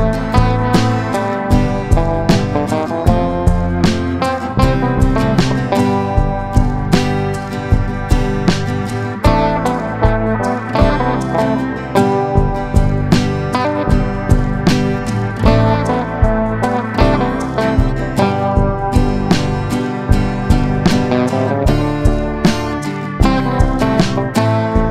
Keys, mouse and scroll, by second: 4.5 right click, 5.0 click, 13.1 ctrl+g, 14.0-15.1 drag, 18.9 ctrl+d, 19.2-21.5 drag, 21.9 ctrl+d, 22.3 ctrl+d, 22.7 ctrl+d, 23.5 click, 24.3 shift+click.